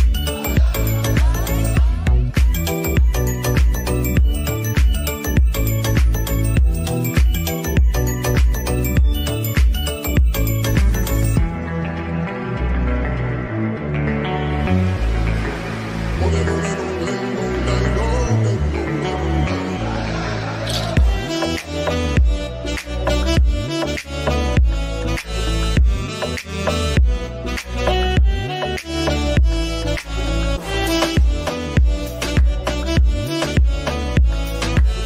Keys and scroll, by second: 5.9-6.9 typing.